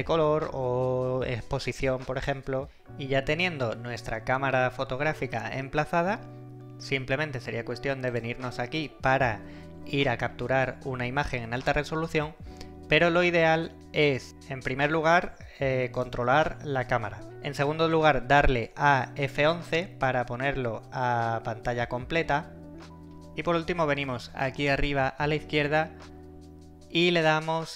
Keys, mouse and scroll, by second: 8.1 click, 16.0 click, 23.0 Escape, 24.6 click.